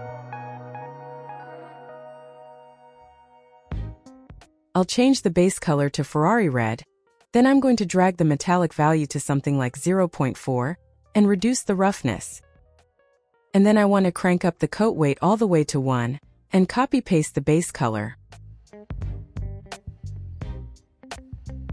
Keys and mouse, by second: 0.3-2.2 drag, 2.6 middle click, 7.7-8.8 drag, 9.8-11.8 drag, 12.8 click, 13.5 click, 15.2-16.7 drag, 17.4 ctrl+c, 18.9 ctrl+v, 20.4-21.6 drag.